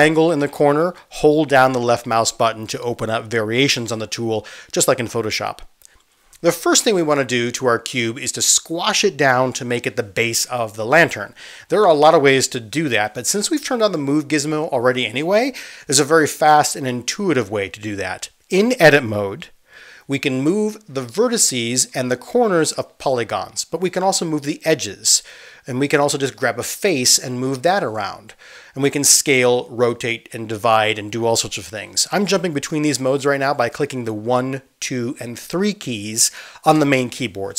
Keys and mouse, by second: 7.0-8.5 middle drag, 8.5-23.3 drag, 23.3 middle click, 23.9-26.8 drag, 25.2 ctrl+z, 26.2 ctrl+z, 26.8 middle click, 27.3-28.8 drag, 28.2 ctrl+z, 28.8 middle click, 29.6 3, 29.8 click, 29.9 middle click, 30.5-33.5 drag, 31.5 ctrl+z, 32.5 s, 33.5-37.5 ctrl+middle drag, 35.2 ctrl+z, 36.7-37.5 typing, 37.0 ctrl+z, 37.1 ctrl+z.